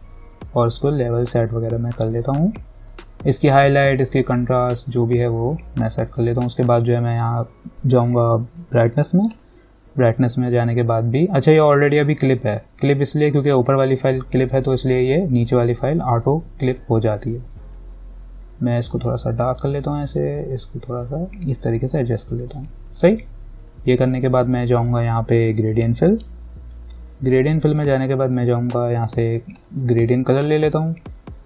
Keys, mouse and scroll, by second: 17.9-23.1 drag.